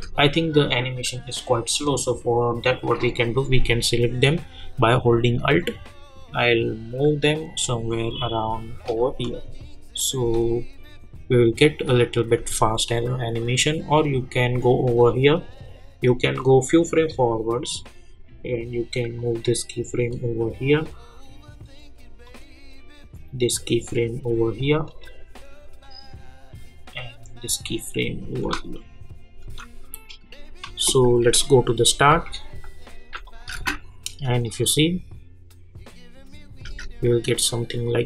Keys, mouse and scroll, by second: 1.8-10.0 drag, 10.4 space, 12.6 space, 28.4 space, 31.3-32.3 typing, 33.2 click, 36.6 space.